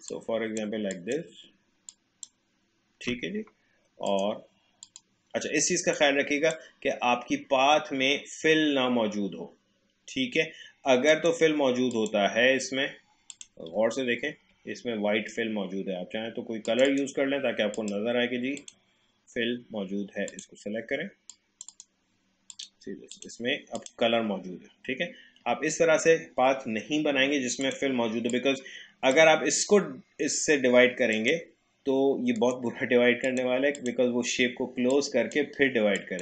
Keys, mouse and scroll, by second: 2.2-8.9 drag, 13.1 click, 14.0 alt+scroll up 1, 16.6 click, 24.3 alt+scroll down 1, 25.0-25.5 alt+scroll up 1, 27.6-31.2 drag, 32.4 right click, 33.3-36.2 drag.